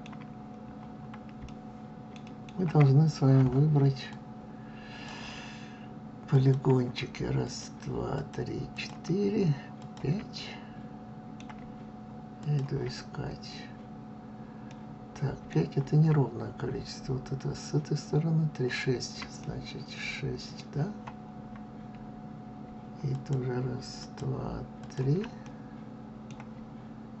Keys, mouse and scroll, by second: 0.2-1.4 scroll up 2, 1.4-4.0 shift+middle drag, 4.0-6.4 drag, 7.4 shift+click, 8.0 shift+click, 8.6 shift+click, 9.7 shift+click, 10.3-12.3 middle drag, 12.3 shift+click, 14.6-17.5 middle drag, 19.3-22.3 middle drag, 23.0 shift+click, 23.9 shift+click, 24.7 shift+click, 25.3-27.2 middle drag.